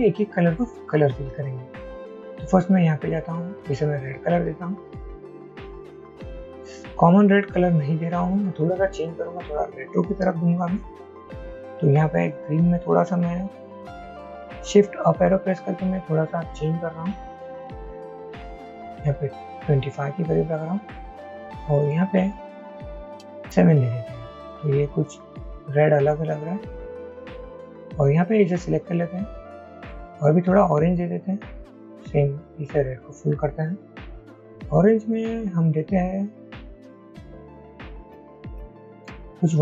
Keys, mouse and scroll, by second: 15.2 shift+Up, 15.4 shift+Up, 15.5 shift+Up, 17.9 Down, 19.6 Up, 22.8 shift+Up, 23.0 Down, 37.0-37.5 shift+Up, 37.8 shift+Up, 38.0 shift+Up, 38.2 shift+Up, 38.4 shift+Up, 39.1 Up.